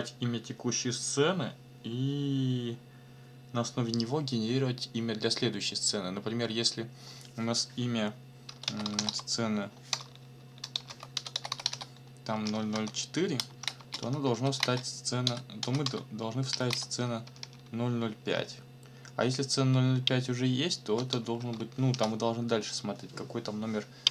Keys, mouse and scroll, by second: 8.3-12.7 typing, 13.8-18.2 typing, 21.4 BackSpace, 21.9 6.